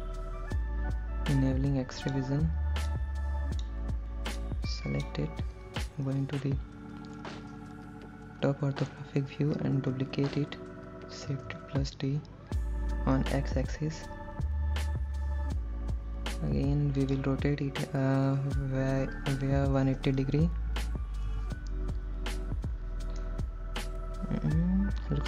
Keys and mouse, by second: 2.2 click, 3.2 click, 4.6 click, 6.4 KP_7, 11.5 shift+d, 13.4 x, 17.2 click, 18.5 r, 20.0 KP_1, 20.3 KP_8, 20.6 KP_0, 21.5 KP_Enter, 23.5-25.2 middle drag.